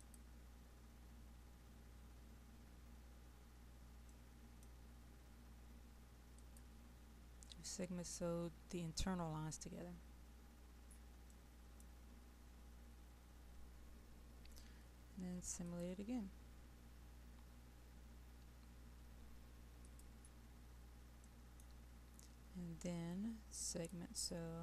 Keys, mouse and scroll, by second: 3.3-4.2 scroll up 1, 4.2 middle click, 6.4 click, 11.7 middle click, 12.2-15.7 scroll down 1, 15.7 click, 20.6-21.2 scroll up 1, 21.2 middle click, 23.7 click.